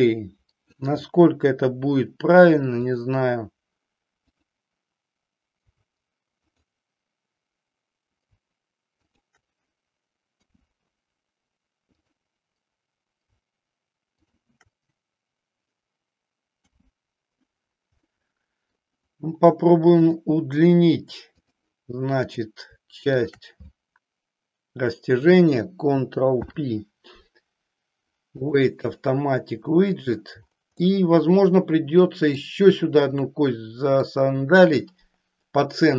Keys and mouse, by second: 2.8 click, 4.2 click, 6.4 click, 8.9 shift+click, 10.4 f, 11.9 click, 14.2 shift+click, 16.6 f, 18.1 middle click, 20.1 click, 23.1 shift+click, 26.3 ctrl+p, 30.9-32.4 middle drag, 33.2-34.2 middle drag.